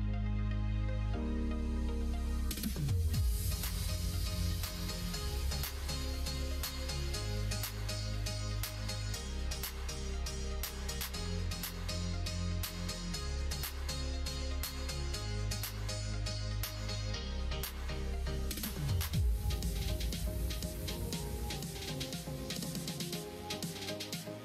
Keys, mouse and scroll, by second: 1.0-6.7 middle drag, 7.3 middle click, 7.6 middle click, 7.9 shift+middle click, 8.6 middle click, 8.9 middle click, 9.9 click, 11.5 shift+click, 11.9 middle click, 12.7 shift+click, 13.1 x, 13.7 x, 15.9 2, 16.2 click, 16.7 shift+click, 17.5 shift+click, 17.9 shift+click, 18.6 ctrl+e, 20.3-22.1 middle drag, 22.4 middle click, 22.9 click, 23.4 shift+click, 23.8 shift+click, 24.2 middle click.